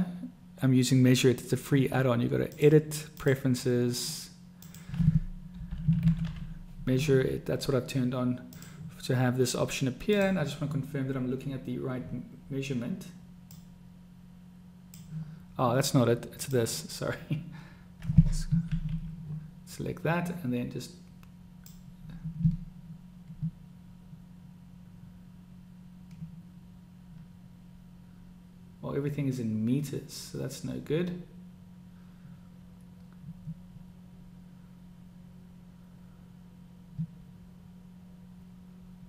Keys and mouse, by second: 2.6-3.7 drag, 10.3 click, 13.6-15.2 drag, 16.4 click, 18.7 ctrl+z, 21.7-39.0 drag.